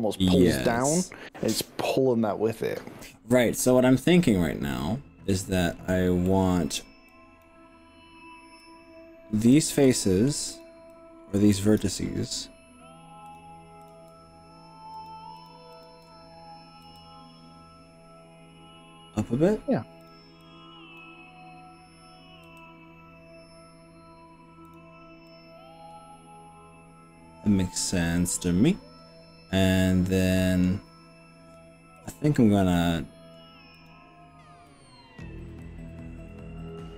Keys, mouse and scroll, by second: 0.4-1.5 middle drag, 4.3-4.9 scroll up 3, 4.8 middle click, 6.3 middle click, 7.1 click, 8.6 click, 9.8 middle click, 11.0 click, 13.3 click, 13.9 click, 15.1 shift+click, 15.3 shift+click, 15.5 click, 15.7 shift+click, 15.9 click, 16.1 shift+click, 16.8 g, 20.1 click, 20.5 click, 22.4 g, 24.7 click, 25.3-30.7 middle drag, 32.1 click, 32.3-33.5 middle drag, 33.5-34.7 drag, 34.7 middle click, 35.7-36.9 drag.